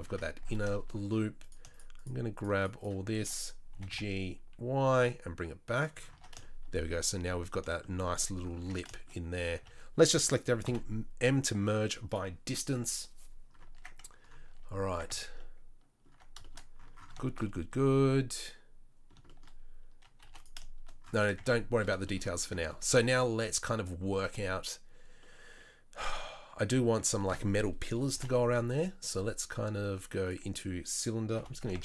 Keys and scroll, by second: 0.0 Tab, 3.7 g, 6.1 Tab, 8.6 Tab, 9.6 a, 10.6 m, 15.1 Tab, 16.1 Tab, 20.2 2, 21.3 Tab, 28.1 shift+a, 31.3 g.